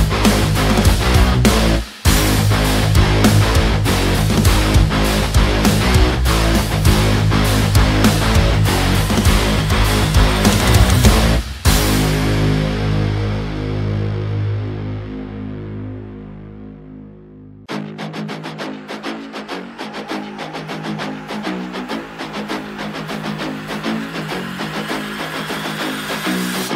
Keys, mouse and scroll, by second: 2.0 ctrl+t, 2.6-7.5 drag, 7.5 ctrl+z, 8.2 click, 9.0 z, 10.2 ctrl+space, 10.4 ctrl+click, 10.6 ctrl+space, 11.1 ctrl+click, 13.1 ctrl+click, 13.3 ctrl+space, 13.7-14.9 alt+right drag, 14.9 click, 16.8 space, 17.4-19.7 drag, 20.0 space, 20.0 click, 20.2 space, 20.8 click, 25.0 space, 25.1 click, 25.3 space, 25.5 click.